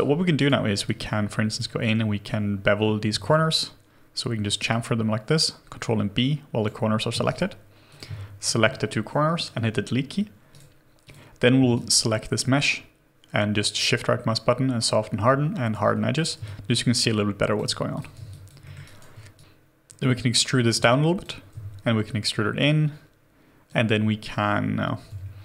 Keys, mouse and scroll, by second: 0.4 right click, 3.1 ctrl+b, 7.3 right click, 7.3 q, 8.4 shift+click, 9.5 Delete, 10.5 right click, 11.7 shift+right click, 16.4 alt+click, 18.3 alt+click, 18.6 alt+middle click, 18.8 alt+right click, 19.4 right click, 20.0 w, 20.8 shift+click, 21.5 r, 25.1 alt+c.